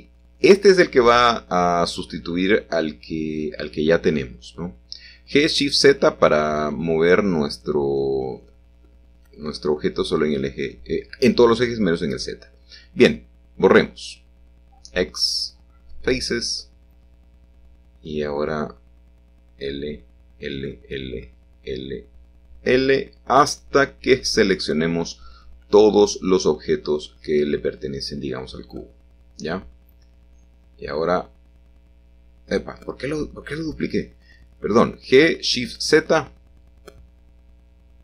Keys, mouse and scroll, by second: 0.0 g, 2.6 shift+z, 3.8 click, 5.0 click, 6.5 i, 7.3 i, 7.8 i, 8.2 i, 8.4 scroll, 9.5 scroll, 10.5 l, 11.4 scroll, 13.1 x, 15.4 click, 17.3-18.4 drag, 18.6-22.1 typing, 24.0 i, 25.2 i, 26.0 i, 27.6 shift+d, 29.4 y, 31.1 Escape, 31.6 ctrl+z, 32.9 g, 33.5 shift+z, 35.5 Escape, 36.7 g, 36.9 y.